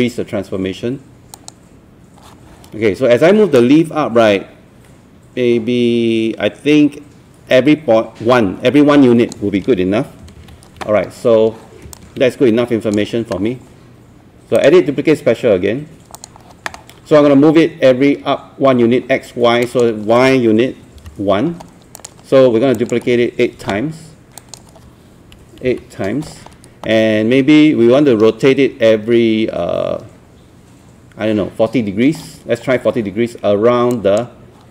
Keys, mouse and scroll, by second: 1.3-10.2 drag, 10.4 ctrl+z, 12.0-17.2 drag, 21.0 KP_1, 22.0 click, 25.7 KP_8, 33.9 click.